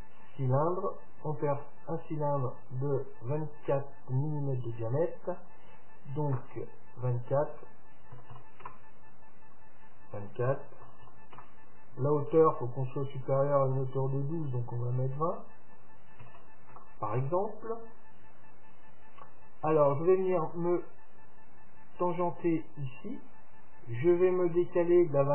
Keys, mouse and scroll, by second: 3.6 click, 4.7 click, 7.1-8.8 drag, 9.9-11.6 drag, 15.3-17.2 drag, 19.4-21.2 drag.